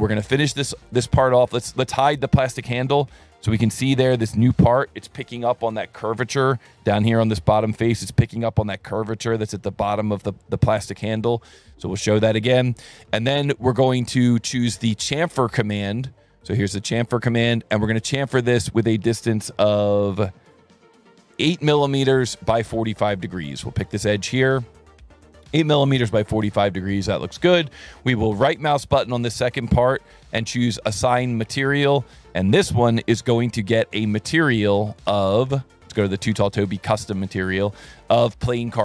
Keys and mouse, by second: 0.8 click, 2.4 click, 12.4 click, 16.7 click, 18.3 click, 21.4 KP_8, 23.7 click, 27.2 click, 29.0 click, 31.5 click, 33.6 click, 34.9 click, 36.0 click, 36.6 click, 37.1 click, 38.2 click.